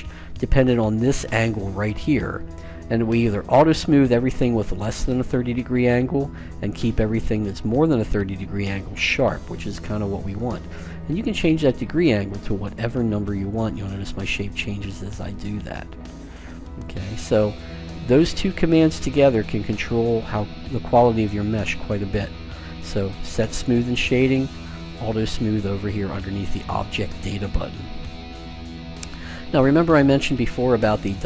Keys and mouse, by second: 10.0-11.8 drag.